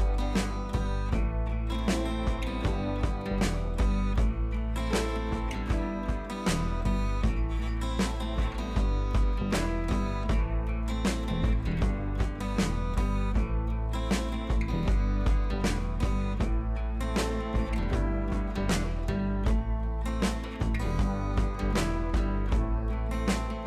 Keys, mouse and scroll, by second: 5.5 click, 13.3 click, 16.6-17.8 drag.